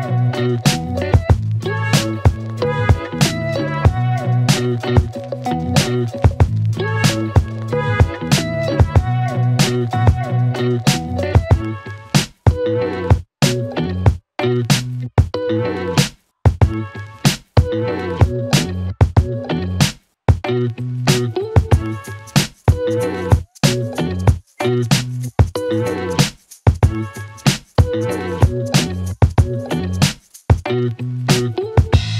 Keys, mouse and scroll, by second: 1.6 click, 2.8 Return, 4.6-5.7 click, 5.6 space, 7.9 space, 9.1-11.2 click, 14.2 space, 17.4 space, 18.7 click, 21.1-22.5 drag, 22.6 space, 26.2 space, 29.9-31.2 click.